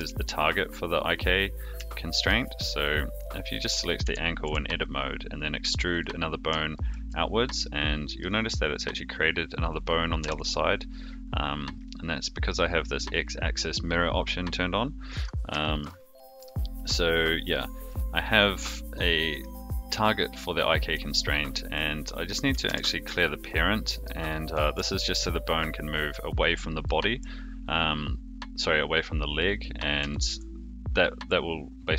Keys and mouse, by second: 1.8 shift+middle click, 4.0 e, 6.7 shift+middle click, 7.6 middle click, 10.2 n, 15.1 click, 15.6 shift+middle click, 16.4 KP_3, 17.4 click, 17.8-19.4 middle drag, 20.0 middle click, 22.6 alt+p, 24.2 middle click, 24.7 g, 26.8 middle click, 29.3 middle click, 30.1 shift+middle click.